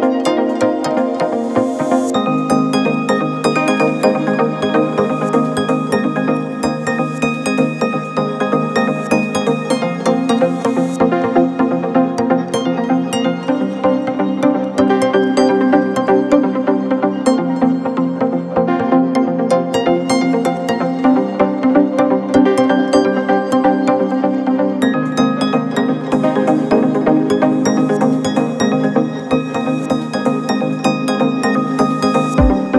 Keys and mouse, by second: 0.1-17.0 drag, 17.0-21.6 middle drag, 17.6 KP_7, 18.6 r, 19.9 s, 20.8 r, 21.6-30.1 drag, 24.4 KP_7, 29.7 s, 30.1 middle click, 30.4-32.7 drag.